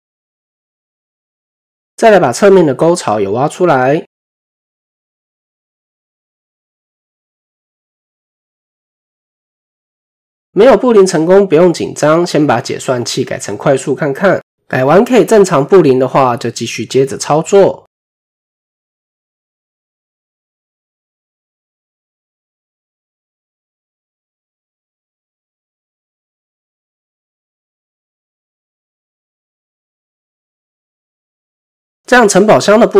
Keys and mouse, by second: 0.4 middle drag, 1.2 click, 1.3 typing, 1.7 middle click, 2.4 click, 2.7 middle click, 4.1 shift+click, 7.3 ctrl+KP_Subtract, 8.1-9.9 middle drag, 10.4 middle click, 13.8 click, 14.6 middle click, 15.2-16.0 middle drag, 16.5 middle click, 17.1 typing, 17.4 middle click, 21.1 ctrl+KP_Subtract, 21.9-22.9 middle drag, 23.5-24.5 middle drag, 24.1 typing, 24.9-26.2 middle drag, 26.6-29.1 middle drag, 29.5 KP_7, 30.3-30.8 shift+middle drag, 31.7 shift+middle drag, 32.7 shift+middle click.